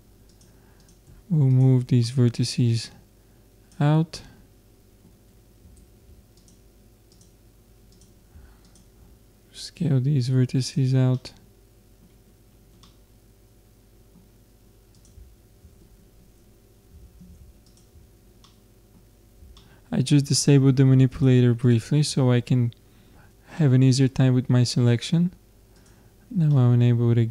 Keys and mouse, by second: 0.8 click, 2.0-4.7 drag, 4.7-6.9 middle drag, 5.8 ctrl+Tab, 7.2-11.1 drag, 11.1-15.0 middle drag, 15.0-16.6 drag, 17.1 ctrl+space, 17.6-19.5 drag, 21.1-23.3 drag, 23.6-25.8 middle drag, 25.8-27.3 drag, 26.6-27.3 middle drag.